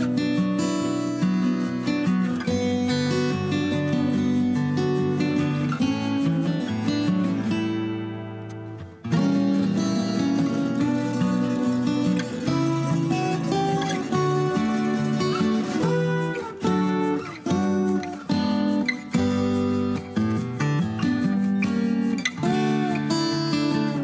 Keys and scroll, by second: 1.2 m, 3.4 Escape, 14.8 Escape, 15.5 ctrl+a, 20.9 Delete.